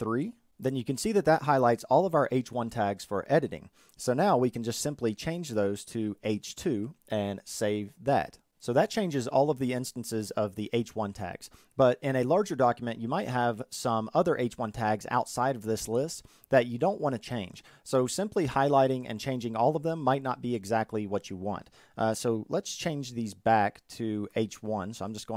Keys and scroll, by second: 3.3 alt+F3.